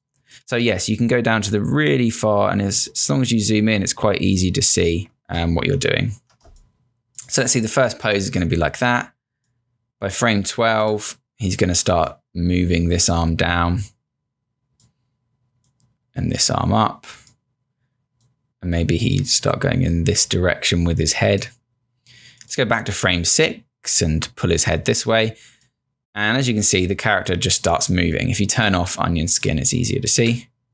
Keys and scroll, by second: 6.5 space, 7.0 space, 7.4 space, 30.2 Return.